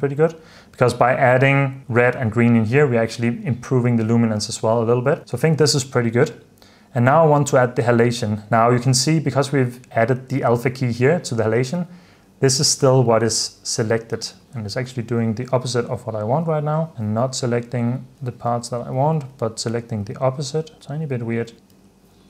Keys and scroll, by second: 0.0 super+d, 4.5 super+d, 5.2 super+s, 11.8 h, 18.7-21.8 typing.